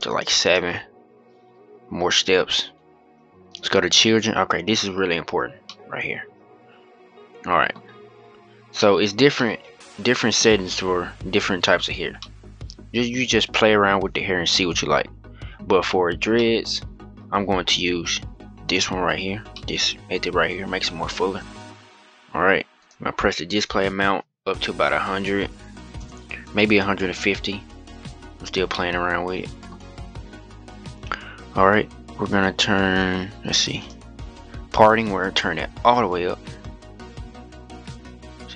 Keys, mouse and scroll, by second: 2.0-3.2 scroll down 3, 3.2 click, 3.6-4.1 scroll down 1, 4.1-4.8 scroll up 5, 4.8-5.4 scroll down 5, 5.4-7.7 middle drag, 7.7-8.5 scroll up 1, 8.5-13.2 middle drag, 13.2 scroll up 1, 16.1-18.5 middle drag, 18.5 click, 19.3-21.3 middle drag, 21.3-22.5 scroll up 1, 22.5-25.1 drag, 25.1 0, 27.6-28.0 scroll down 11, 28.0-28.5 scroll up 7, 28.5-29.6 middle drag, 29.6-30.3 scroll up 2, 30.3-32.8 scroll down 6, 32.8-33.5 scroll down 1, 33.5-38.1 drag.